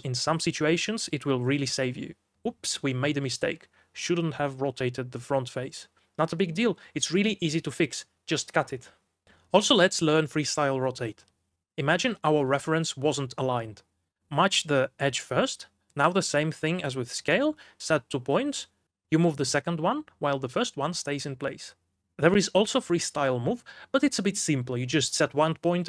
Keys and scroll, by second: 6.0 shift+a, 7.2 c, 7.9 x, 9.3-10.4 typing, 13.0 r, 13.4 g, 14.6-15.7 typing, 17.9 Escape, 18.5 r, 19.0 f, 25.3 Return.